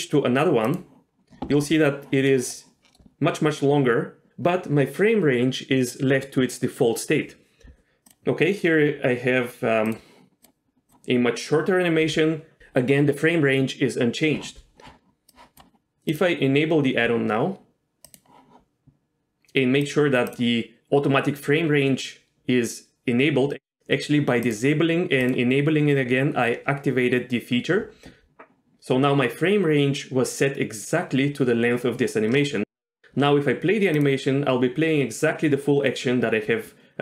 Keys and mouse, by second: 2.4 middle click, 2.9 middle click, 8.0 click, 19.8 click, 20.3 click, 24.5 click, 25.2 click.